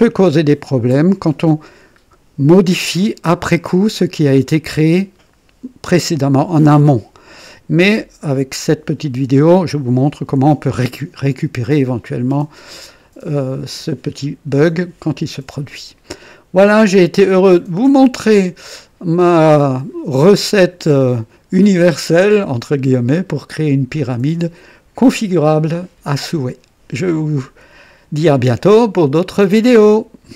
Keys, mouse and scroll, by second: 17.2 click, 18.6-20.1 drag, 19.4-20.1 right drag, 23.6 scroll up 1.